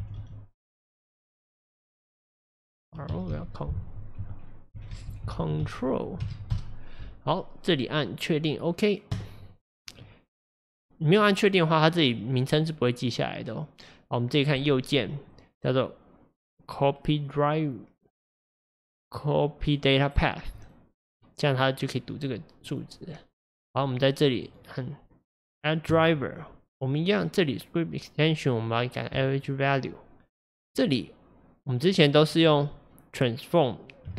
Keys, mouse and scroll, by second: 6.5 Left, 22.7 click, 29.2-34.1 right drag.